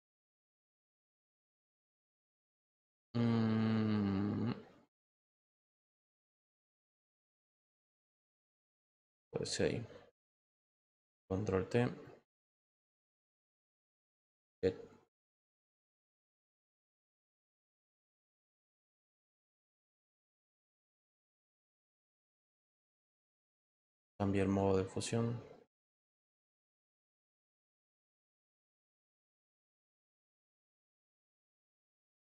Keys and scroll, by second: 10.9 ctrl+t, 22.2 Return.